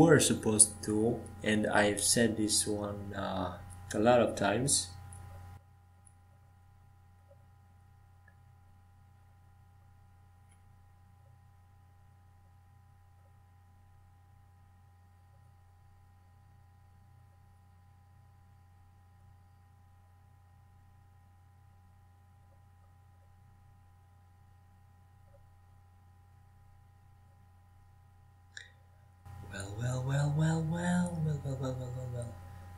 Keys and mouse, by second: 1.1-4.9 right drag, 4.9 shift+d, 10.6 shift+d, 15.5-18.5 drag, 22.0-31.1 drag, 31.1-32.7 right drag.